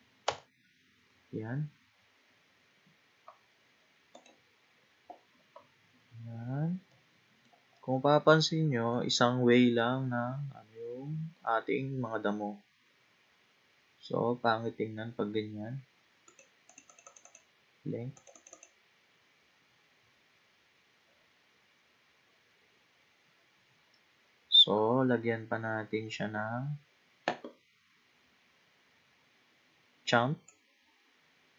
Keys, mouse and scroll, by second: 2.8-4.2 scroll down 2, 4.2 click, 5.3-6.3 scroll up 5, 6.3-6.8 scroll down 4, 6.9-8.5 middle drag, 8.5-9.6 scroll up 4, 10.2-10.8 scroll down 1, 11.7-12.1 scroll down 2, 13.2 scroll down 2, 16.3-20.5 drag, 20.5-22.7 scroll down 10, 22.7-23.5 scroll down 3, 23.5-25.6 scroll down 3, 26.3-27.8 scroll down 2, 27.8-28.9 scroll down 10, 30.5-31.5 drag.